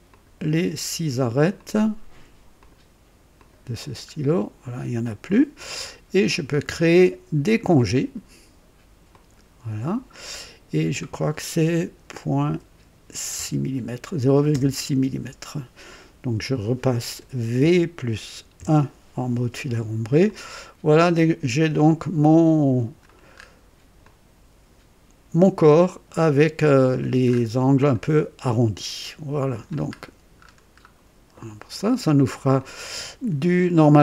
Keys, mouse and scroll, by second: 0.1 ctrl+click, 1.6 ctrl+click, 2.6 ctrl+click, 3.4 ctrl+click, 3.8-5.9 ctrl+drag, 9.1 click, 12.4 KP_Decimal, 13.3 KP_6, 14.5 KP_Enter, 17.6 v, 18.5 KP_1, 20.2-23.1 drag, 23.3 scroll up 1, 24.0-27.1 drag, 27.2 scroll up 1, 27.9 click, 29.2 click, 29.9-31.0 scroll down 3, 31.8-32.4 drag, 32.6-33.8 drag.